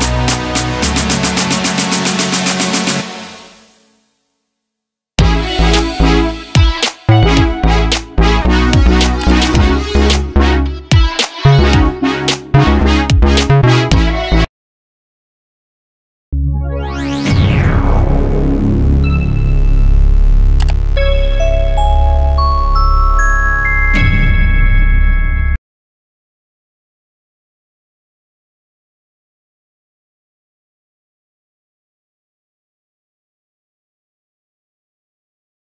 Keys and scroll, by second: 0.3 BackSpace, 0.6 5, 0.7 Return, 3.4 space, 8.5 ctrl+s.